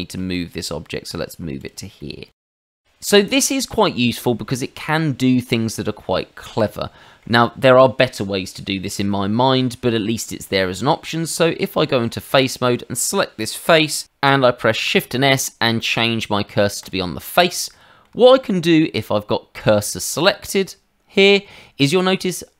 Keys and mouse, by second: 0.1 g, 1.6 click, 1.9 middle click, 3.0 middle click, 4.6 middle click, 9.1 middle click, 11.0 Tab, 12.4 click, 14.8 shift+s, 16.8 click, 17.7 middle click, 18.2 shift+middle click, 20.2 click.